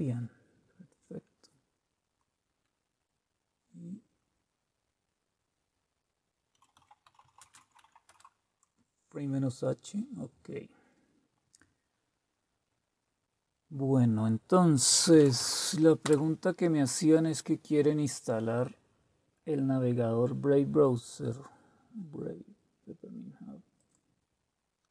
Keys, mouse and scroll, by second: 6.3-8.4 typing, 14.6-15.8 typing, 16.0 Return, 23.7 click.